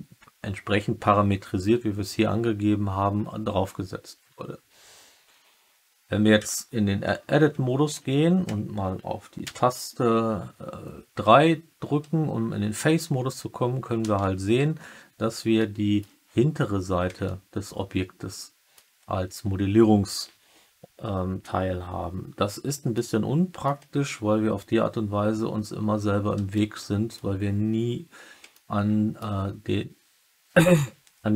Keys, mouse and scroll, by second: 6.3 Tab, 9.3 3, 15.5 alt+click, 17.2-18.7 alt+drag, 22.9 alt+middle click, 26.5 alt+middle click, 28.4 alt+middle click.